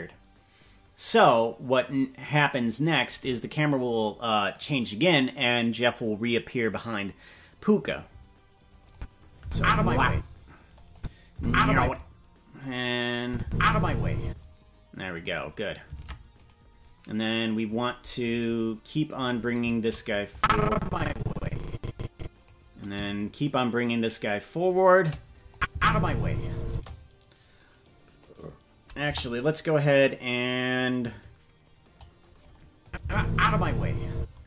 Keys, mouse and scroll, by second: 8.9 click, 9.4 space, 10.1 space, 10.9 click, 11.3 space, 11.8 space, 12.0 scroll up 4, 13.2 click, 13.4 space, 14.2 space, 15.2 right click, 15.9 ctrl+Tab, 16.5-17.8 right drag, 18.4-19.1 scroll down 3, 20.3-22.5 drag, 23.4-25.1 shift+drag, 25.5 click, 25.7 space, 26.7 space, 29.0 KP_0, 30.0-31.0 scroll down 2, 32.8 click, 33.0 space, 34.1 space.